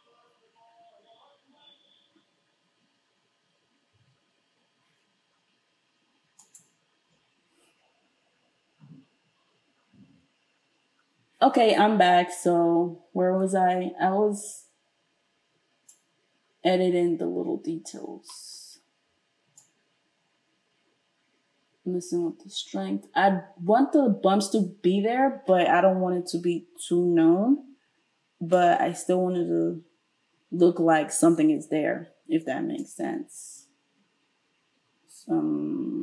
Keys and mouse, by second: 6.5-14.4 middle drag, 14.4-36.0 drag.